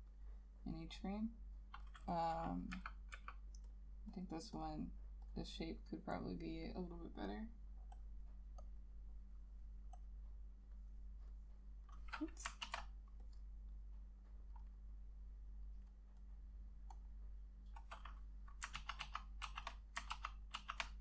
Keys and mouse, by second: 2.8 [, 3.3 [, 4.4 double click, 12.8 ctrl+z, 17.2 double click, 18.9 ctrl+z, 19.1 ctrl+z, 19.6 ctrl+z, 20.3 ctrl+z, 20.7 ctrl+z.